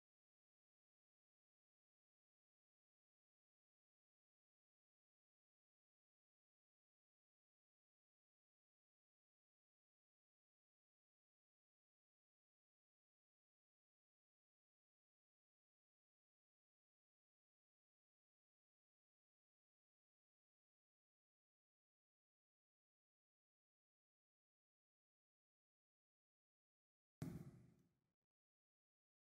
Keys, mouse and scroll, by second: 1.1 click, 1.3 alt+click, 1.9 alt+middle click, 3.6 click, 4.6 s, 5.8 z, 6.9 scroll, 7.6 scroll, 7.6 z, 9.2 click, 10.4 alt+right click, 12.9 click, 14.8 click, 18.7 click, 20.3 click, 22.2 click, 25.6 click, 26.4 alt+middle click.